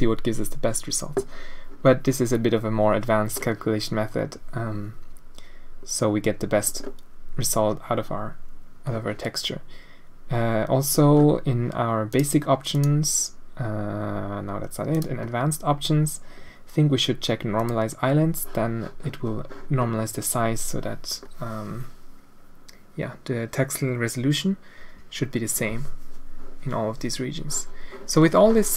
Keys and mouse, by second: 12.1 click, 12.7 click, 14.9 click, 17.5 click, 19.7 middle click, 21.2 middle click.